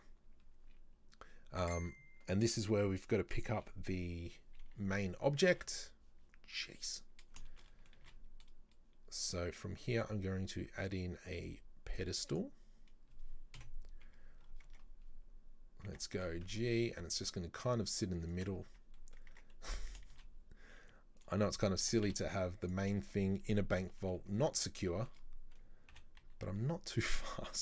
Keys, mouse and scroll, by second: 5.3 right click, 5.5 a, 5.6 w, 6.6-7.0 middle drag, 7.0-7.5 scroll down 2, 7.5-8.1 shift+middle drag, 8.1 shift+a, 13.7 KP_7, 14.5 scroll up 2, 14.7 Tab, 16.0 Tab, 16.2 g, 18.7-19.0 scroll up 2, 19.0 middle click, 19.4 Tab, 19.7 s, 21.5 middle click, 21.9 s, 23.1 shift+middle click, 23.9 KP_3, 25.0-26.0 shift+middle drag, 26.0 g.